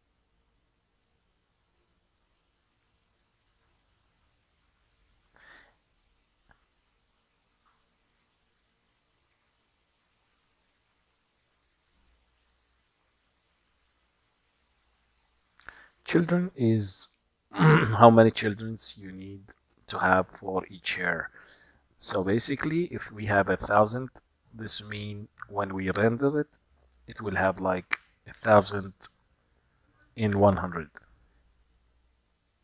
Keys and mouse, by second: 10.5 click, 11.6 click.